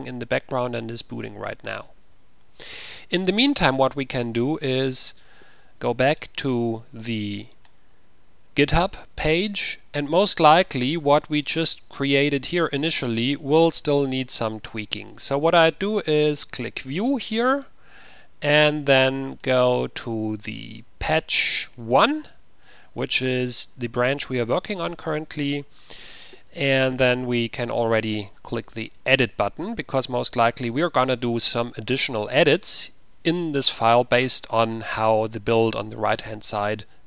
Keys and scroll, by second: 27.1 Return, 27.3 ctrl+-.